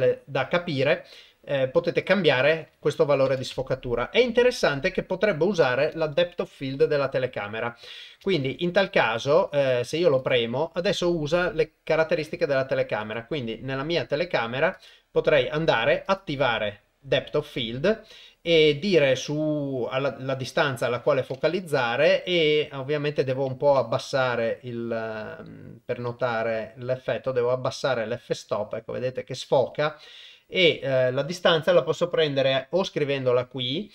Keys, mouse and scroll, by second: 2.4-3.6 drag, 8.4 ctrl+Tab, 10.2 click, 13.0 click, 17.0 click, 17.4 click, 22.1-29.1 drag.